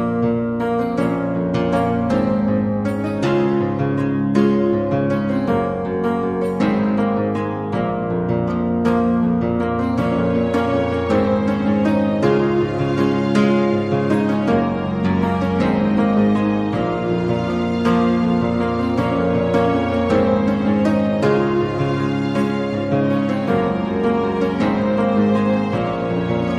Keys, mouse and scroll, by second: 0.7 middle click, 1.0 shift+middle click, 1.6 g, 2.9 z, 3.6 click, 4.0 z, 8.7 Tab, 8.7 middle click, 9.7 middle click, 11.0 a, 11.2 a, 11.7 click, 11.7 a, 14.1 click, 14.6 middle click, 15.4 Tab, 15.7 a, 15.9 a, 16.1 shift+middle click, 17.2 middle click, 18.2 z, 18.5 click, 18.5 1, 19.2 z, 21.1-22.7 drag, 22.7 middle click, 23.6 click, 23.9 z, 25.1 g.